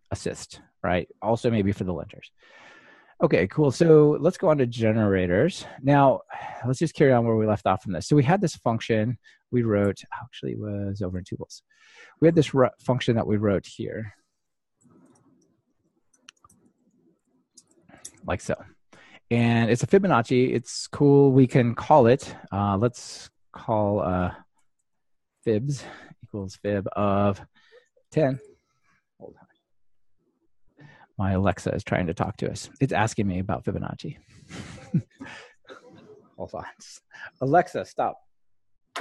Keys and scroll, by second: 14.3 super+c, 18.1 super+v.